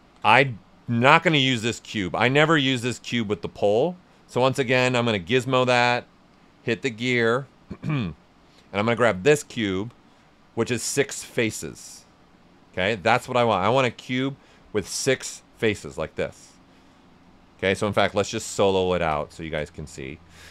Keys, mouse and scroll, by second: 0.0 shift+f, 1.0 alt+right click, 4.5 w, 6.3 click, 9.0 click, 9.6 right click, 14.9 click, 15.3-17.2 right drag, 17.2 click, 18.4 right click, 18.8 right click, 19.4 ctrl+click, 19.7 right click, 20.0 alt+right click.